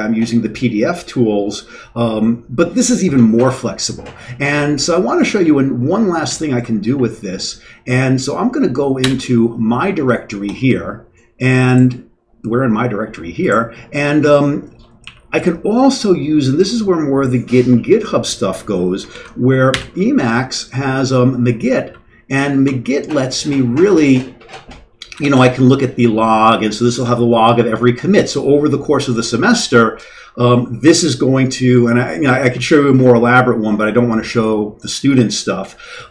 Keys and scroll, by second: 4.9 Down, 5.0 Down, 5.2 Down, 5.4-6.1 Down, 6.2 Down, 6.4 Down, 9.0 Return, 15.0 Up, 19.1 ctrl+x, 19.7 g, 21.7 Down, 22.3 Up, 22.6 Tab, 23.3 Down, 23.5 Down, 25.1 l, 25.3 l.